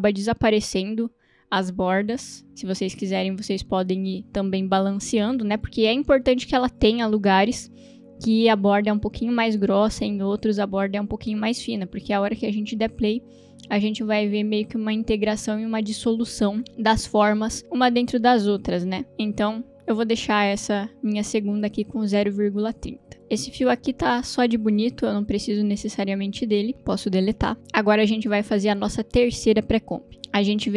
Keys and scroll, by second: 26.7 Delete.